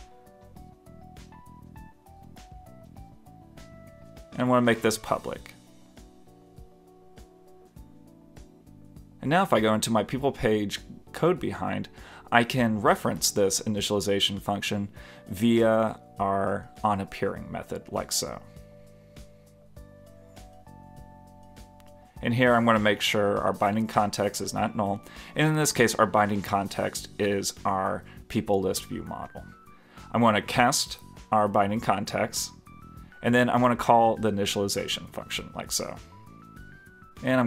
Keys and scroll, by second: 3.6 super+Left, 5.2 super+s, 34.0 super+s, 34.9 super+s, 35.4 super+Return.